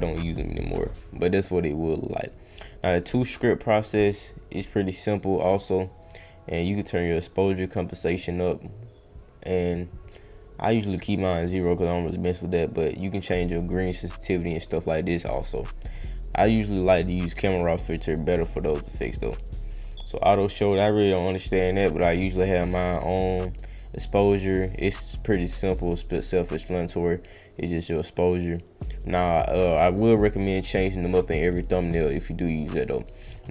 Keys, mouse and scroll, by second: 1.4 click, 2.2 click, 4.4-10.8 drag, 12.2-15.5 drag, 19.2 click, 20.1 click, 20.6 click, 20.9 click, 22.7 click, 23.9 click, 24.6 click, 25.5-29.3 drag, 31.0 click, 31.4 click, 32.0 click, 32.8 click.